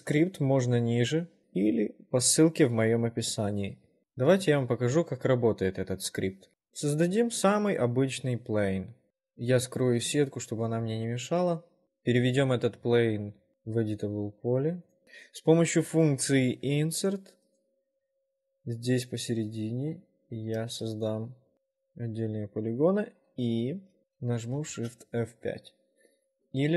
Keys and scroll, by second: 11.0 ctrl+r, 24.7 shift+5.